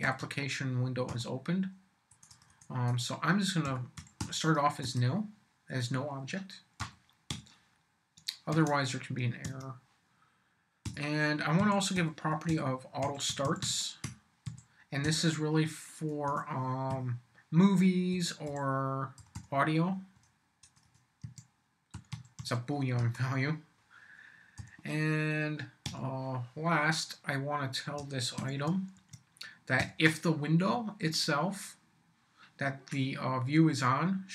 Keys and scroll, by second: 0.0-1.1 typing, 2.1 BackSpace, 3.4-4.7 typing, 4.8 Return, 6.8 m, 7.3 y, 8.2 shift+y, 8.5 shift+q, 9.4 shift+Tab, 10.8-15.0 typing, 16.3 BackSpace, 16.9 =, 18.1 f, 18.5 u, 19.2 l, 20.1 BackSpace, 21.2-22.9 typing, 23.0 Return, 24.6 m, 25.8 y, 28.4 shift+q, 28.9 shift+Tab, 29.8 ..